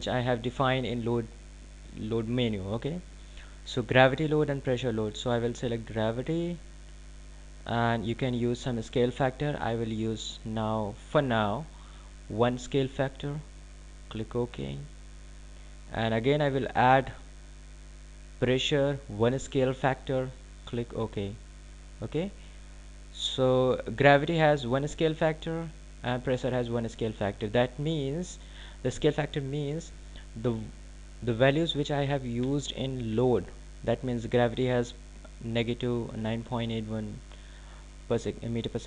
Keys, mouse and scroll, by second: 8.1 click, 15.8 click, 19.0 click.